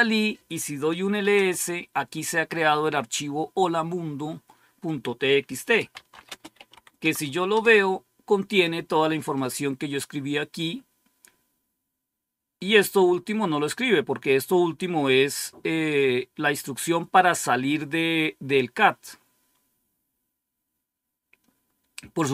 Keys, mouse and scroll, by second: 0.7-1.6 typing, 5.4-7.1 typing, 7.4 Return, 12.8 click.